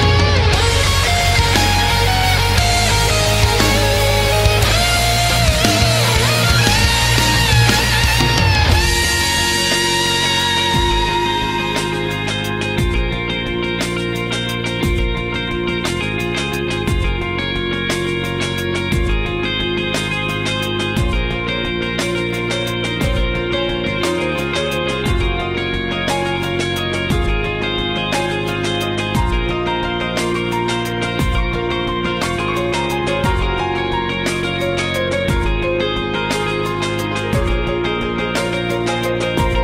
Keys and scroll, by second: 5.0 space, 6.4 ctrl+z, 10.6 space, 11.2 space, 12.3 ctrl+z, 12.5 ctrl+z, 13.7 space, 14.0 ctrl+z, 16.9 ctrl+z, 17.6 ctrl+z, 19.6 ctrl+z, 20.4 ctrl+z, 21.2 ctrl+z, 21.9 ctrl+z, 24.1 ctrl+z, 24.5 ctrl+z, 25.2 ctrl+z, 26.2 ctrl+z, 26.6 ctrl+z, 33.8 ctrl+z, 34.4 ctrl+z, 34.6 ctrl+z, 35.1 ctrl+z, 38.0 ctrl+z, 38.5 ctrl+z, 38.8 ctrl+z.